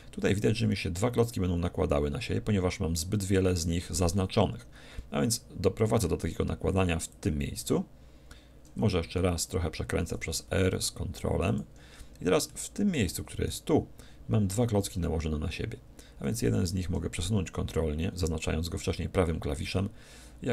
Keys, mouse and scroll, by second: 7.3-9.0 drag, 10.1 r, 11.5-13.1 drag, 12.5-14.3 middle drag, 13.5-15.1 right drag, 14.8-16.9 middle drag, 16.8 g, 19.7-20.5 drag.